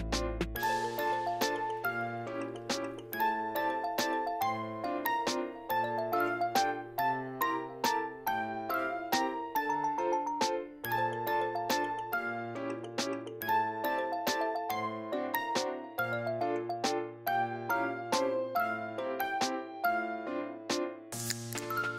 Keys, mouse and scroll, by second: 0.0 click, 0.3 ctrl+z, 0.6 click, 1.1 shift+s, 1.2 scroll up 1, 1.3 middle click, 1.5 click, 1.9 ctrl+z, 1.9 ctrl+z, 2.1 click, 3.0 middle click, 3.3 click, 4.3 click, 4.5 middle click, 4.7 scroll down 2, 4.8 click, 5.5 middle click, 5.6 scroll up 2, 5.7 middle click, 6.5 click, 7.1 ctrl+z, 7.1-8.5 drag, 9.4-10.8 drag, 10.8 middle click, 10.9 click, 11.1 scroll down 3, 11.2 middle click, 11.4 m, 11.5 m, 11.5 scroll up 6, 11.7 click, 12.0 scroll down 1, 12.0 middle click, 12.5 click, 13.2 click, 13.8 scroll down 3, 14.0 `, 14.2 m, 15.1 m, 15.2 click, 15.5 middle click, 15.6 scroll down 2, 15.7 scroll up 3, 16.0 click, 16.6 shift+f, 16.8 click, 17.3 scroll down 1, 17.4 middle click, 17.6 click, 18.0 scroll down 1, 18.0 middle click, 18.2-19.4 drag, 19.4 scroll down 3, 19.5 m, 19.6 middle click, 19.9 scroll up 5, 20.0 middle click, 20.1 m, 20.2 click, 20.5 middle click, 20.6 click, 21.0 scroll up 1, 21.1-21.9 drag.